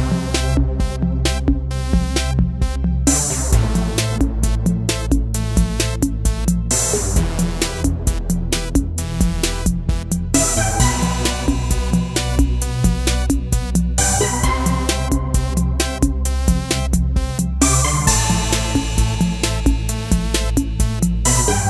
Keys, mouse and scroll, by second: 2.7-21.6 drag.